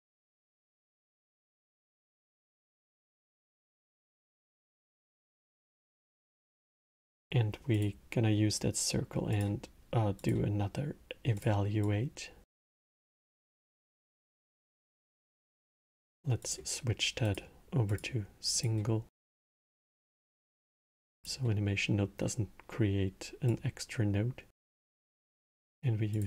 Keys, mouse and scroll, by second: 1.3 click, 2.9-5.3 drag, 5.3-6.3 middle drag, 6.3 shift+a, 11.1 click, 11.6 click, 13.9 click, 14.7 x, 14.9 click, 16.2 click, 17.1-19.6 drag, 23.3 click, 24.9-26.2 drag.